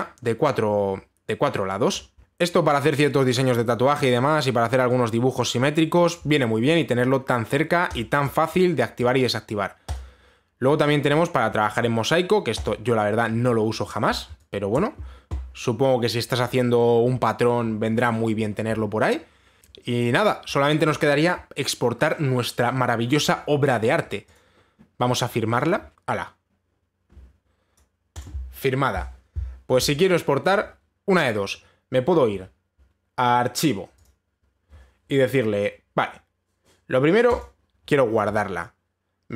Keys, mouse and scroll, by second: 0.2 click, 2.7 click, 4.5 click, 6.7 click, 8.5 click, 8.8 click, 8.9 click, 9.7 click, 11.2 click, 11.2-12.0 scroll, 12.2 scroll down 8, 13.2 scroll, 13.2 click, 13.2-13.9 scroll down 7, 13.9-14.4 scroll down 3, 14.4-14.9 scroll, 15.3 click, 15.6-17.9 scroll, 17.9 scroll, 24.9 click, 28.3 click, 28.8 click, 34.6 click, 38.0 click.